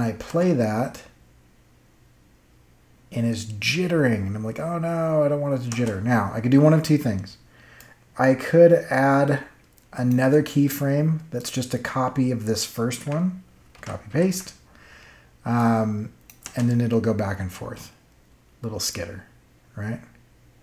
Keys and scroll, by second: 0.2 space, 5.6 space, 13.7 ctrl+c, 14.0 ctrl+v, 16.4 space.